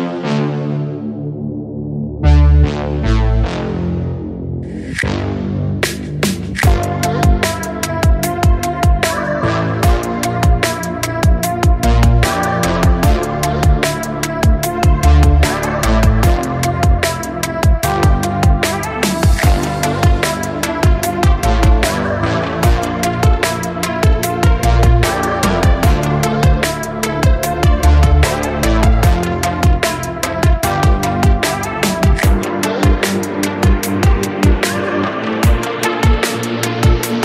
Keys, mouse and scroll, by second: 0.8 scroll down 1, 2.2-2.9 scroll down 6, 2.9-4.5 shift+middle drag, 4.5-11.2 drag, 11.8-12.2 scroll up 2, 12.2-14.0 shift+middle drag, 14.0-14.5 drag, 14.5 scroll down 2, 14.8 shift+middle click, 15.1 click, 15.5 click, 16.0 g, 17.6-18.5 scroll down 4, 18.5 g, 20.9-21.3 scroll up 8, 21.3-22.0 shift+middle drag, 22.0 scroll up 1, 22.2 shift+middle click, 22.5-23.1 scroll up 1, 23.1 click, 23.8 shift+click, 24.6 ctrl+p, 26.2-26.7 scroll down 1, 26.7 shift+middle click, 27.0 drag, 27.5 drag, 28.8 click, 29.0-29.6 scroll down 1, 29.6 g.